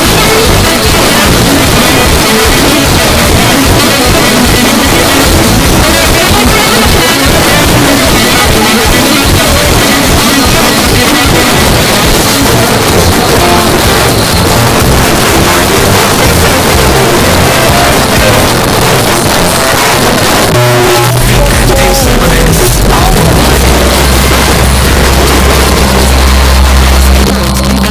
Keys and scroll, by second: 18.5 Page_Down, 27.2 Page_Down.